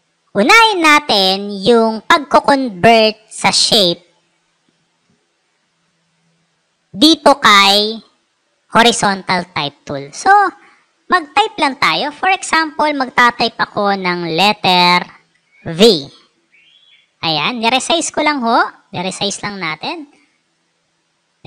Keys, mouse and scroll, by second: 5.6 click, 5.9 right click, 9.1 click, 10.3 click, 13.0 shift+v, 14.9-18.2 ctrl+drag.